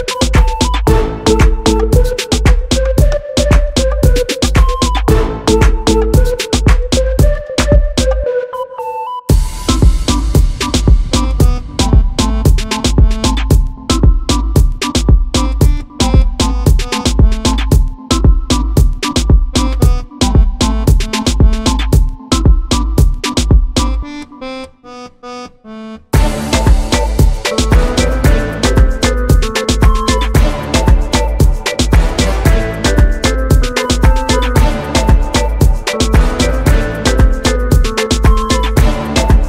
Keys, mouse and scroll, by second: 0.0 click, 0.5 shift+click, 0.6-5.9 typing, 1.0 click, 1.3 click, 3.0 click, 3.7 click, 7.6 click, 8.4 2, 8.6 alt+click, 9.1 alt+shift+click, 10.2-15.4 right drag, 10.6 alt+a, 11.6 Tab, 12.1-14.3 typing, 12.5 scroll down 2, 13.1 Tab, 14.4-15.4 scroll down 1, 15.4 click, 16.0 o, 17.2 right click, 18.5-24.2 drag, 20.4 scroll down 1, 21.1 g, 24.2 scroll up 1, 24.4 `, 25.0 2, 25.4 alt+click, 25.9 alt+shift+click, 27.2 click, 29.0 click, 29.4 alt+click, 30.6 shift+click, 31.4 e, 32.3 `, 33.4 alt+click, 33.7 `, 34.4 click, 35.9 `, 36.3 ctrl+z, 37.2 ctrl+click, 38.2 `.